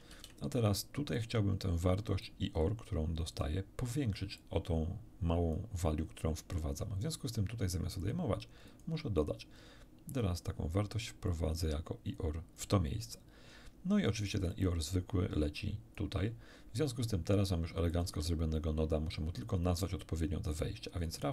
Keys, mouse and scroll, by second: 0.1 shift+d, 1.1 click, 2.2-3.6 drag, 4.4-5.7 drag, 8.0 click, 8.7 click, 9.2 click, 10.1 click, 11.3-12.7 drag, 14.5-16.1 drag, 17.9 click, 18.1 x.